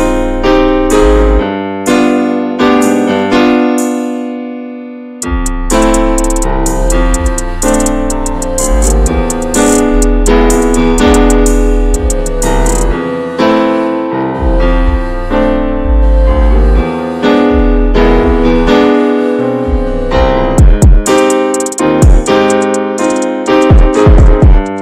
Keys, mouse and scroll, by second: 0.0 click, 1.1 click, 3.1 ctrl+click, 4.0 s, 7.3 scroll down 2, 7.5 middle click, 7.8 alt+z, 8.1 shift+middle click, 8.1-9.7 scroll up 3, 8.4 middle click, 8.8 shift+middle click, 9.7 ctrl+r, 10.6 3, 10.7 click, 11.1 alt+shift+click, 11.4 alt+shift+click, 11.7 middle click, 12.1 e, 13.7 middle click, 14.0 2, 14.2 click, 14.5 alt+shift+click, 15.2 alt+shift+click, 15.9 ctrl+b, 19.8 scroll down 1, 20.0 Tab, 20.1 click, 20.3 scroll down 2, 20.4 middle click, 20.6 scroll up 1, 20.7 scroll down 1, 20.9-21.5 shift+middle drag, 21.5 ctrl+s, 21.8 drag, 22.0-22.8 shift+middle drag, 22.8 ctrl+s, 22.9 scroll down 2, 23.1-24.7 middle drag, 24.7 ctrl+s.